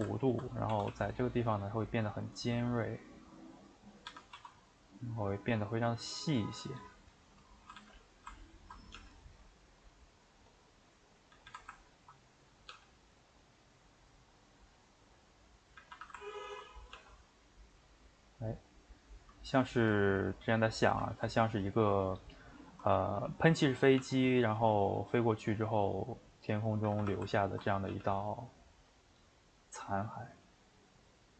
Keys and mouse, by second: 0.3 ctrl+Right, 0.7 s, 2.9-4.0 middle drag, 4.0 a, 4.3 s, 6.6-7.7 middle drag, 7.7 a, 7.9 middle click, 8.6 ctrl+Right, 8.9 g, 10.9 middle click, 11.3 a, 11.4 a, 11.9 ctrl+Right, 12.2 middle click, 12.7 g, 15.5 middle click, 15.8 a, 15.9 a, 16.4 ctrl+Right, 16.9 g, 20.4 middle click, 20.7 a, 20.8 a, 22.3 ctrl+Right, 24.0 g, 26.8 a, 27.0 a, 27.5 ctrl+Right, 27.9 g.